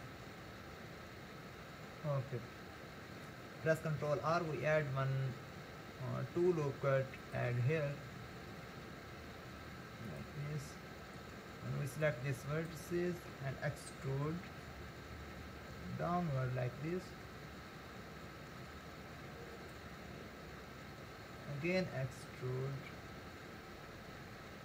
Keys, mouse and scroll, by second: 4.3 ctrl+r, 12.1 click, 14.5 e, 21.7 e.